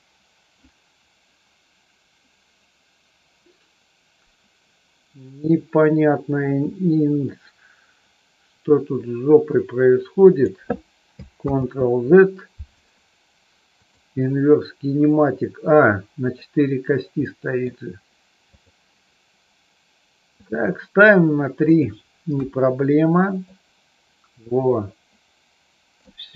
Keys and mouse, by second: 10.2 click, 11.5 ctrl+z, 13.7 click, 17.2 middle click, 18.3 click, 20.3 click, 21.6 click, 22.3 KP_3, 23.5-26.1 drag.